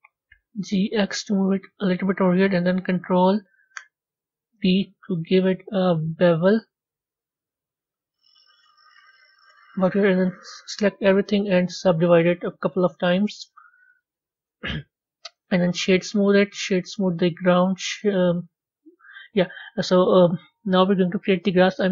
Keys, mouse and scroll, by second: 4.3 b, 11.0-14.3 right drag, 14.3 Tab, 15.2-16.2 right drag, 16.2 click, 16.7-19.8 right drag, 19.8-20.7 scroll down 3, 20.7 click.